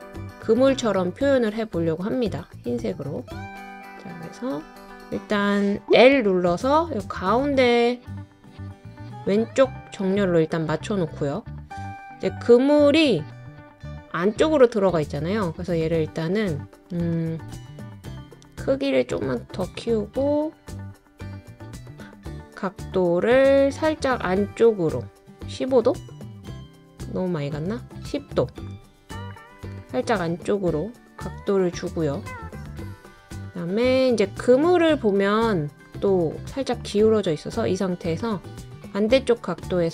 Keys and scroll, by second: 17.0 super+z.